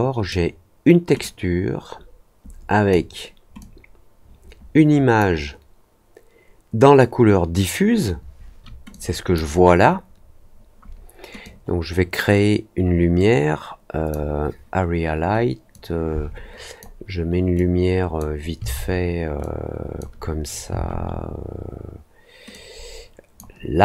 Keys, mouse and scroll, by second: 1.1-2.8 drag, 3.5-5.1 drag, 8.8 click, 11.4-14.0 drag, 15.6-16.7 drag, 17.5 click, 19.3 click, 22.4 click.